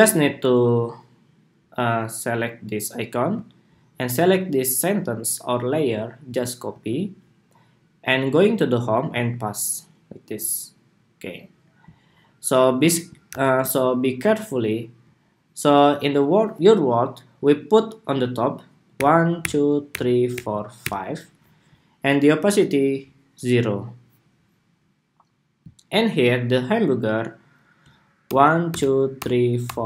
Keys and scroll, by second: 6.4 super+c, 8.8 super+v, 13.0 super+=.